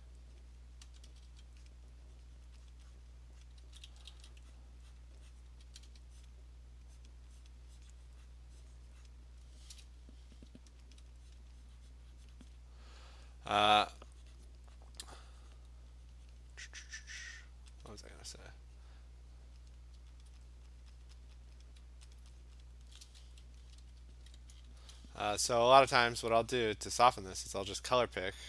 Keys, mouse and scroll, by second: 0.4 click, 0.8 click, 0.9 alt+click, 0.9 ], 1.1 ], 1.3 ], 1.7 click, 2.5 click, 2.7 click, 2.9 click, 3.0 alt+click, 3.0 click, 3.2 click, 3.5 click, 3.6 [, 3.9 [, 4.1 [, 4.6 click, 5.0 click, 5.7 click, 5.7 ], 5.9 ], 6.3 click, 7.1 click, 7.5 click, 7.9 click, 8.4 click, 8.8 click, 9.1 click, 11.0 alt+click, 11.4 click, 12.5 click, 13.9 alt+click, 14.5 click, 14.9 click, 15.6 click, 16.0 alt+click, 16.5 click, 16.6 alt+click, 17.2 click, 17.5 alt+click, 17.9 alt+click, 18.3 click, 19.5 click, 19.7 click, 20.3 alt+click, 20.6 click, 20.9 click, 21.1 click, 21.3 click, 21.5 click, 21.7 click, 22.2 alt+click, 22.5 click, 22.7 click, 24.0 ], 24.0 ], 24.3 ], 25.7 alt+click, 26.1 alt+click, 26.6 click, 27.1 click, 27.4 click, 27.7 alt+click, 27.8 click, 28.1 click, 28.3 click.